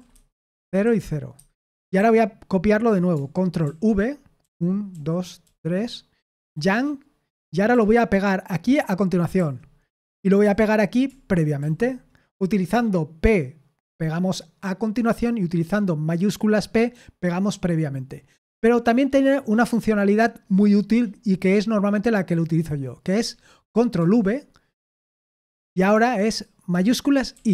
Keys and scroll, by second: 0.0-2.6 typing, 3.6 ctrl+v, 4.9-5.4 typing, 6.5-7.7 typing, 9.3 typing, 10.4 typing, 11.6 typing, 22.3-23.6 typing, 24.0 ctrl+v, 25.0-25.9 typing, 27.3 typing.